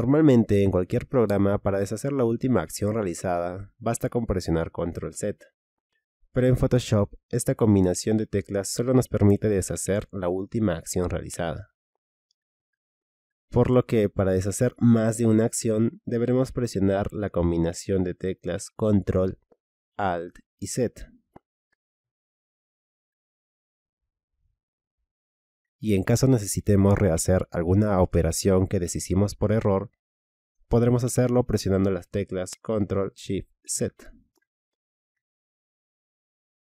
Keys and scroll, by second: 8.0 ctrl+z, 18.2 ctrl+alt+z, 23.9 ctrl+alt+z, 32.0 ctrl+shift+z.